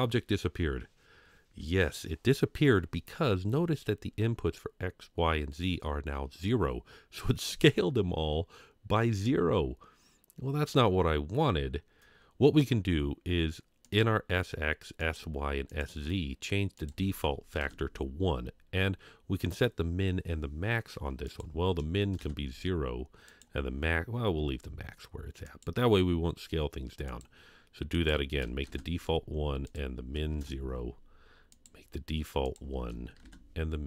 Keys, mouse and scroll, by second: 3.5-6.6 scroll down 2, 13.8 click, 15.0 click, 15.7 click, 16.8 click, 21.2-22.2 drag, 23.3-25.6 drag, 27.1 click, 27.9 click, 29.6 click, 31.5 click, 32.4 click.